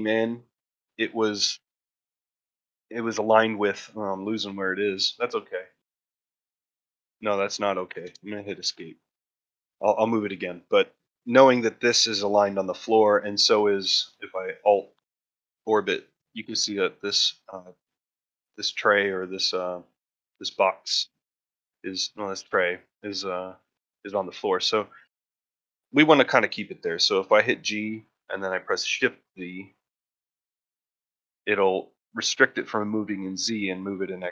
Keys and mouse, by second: 8.8-9.1 shift+middle drag, 13.1-14.3 middle drag, 15.2-15.9 middle drag, 17.9-18.3 middle drag, 18.8 middle drag, 20.3 middle drag, 20.7-21.5 middle drag, 21.9-22.3 middle drag, 22.3 middle drag, 23.1 middle click, 24.4 middle drag, 26.6-27.0 middle drag, 27.1 shift+middle click.